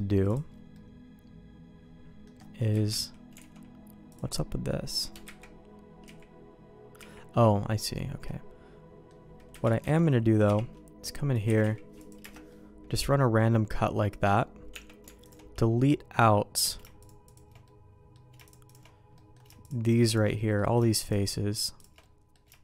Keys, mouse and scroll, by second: 0.2 click, 0.7-2.2 middle drag, 2.7 KP_1, 3.3 alt+a, 4.0 click, 4.3 middle click, 5.2 KP_1, 6.0 z, 6.9 z, 8.2 middle click, 9.5 KP_1, 9.8 alt+a, 10.4 k, 12.4-14.2 middle drag, 14.7 Tab, 15.2 alt+click, 16.9 shift+click, 17.6 middle click, 18.4 shift+click, 19.1 middle click, 19.6 shift+click, 20.3 middle click, 21.0 shift+click, 22.0 middle click.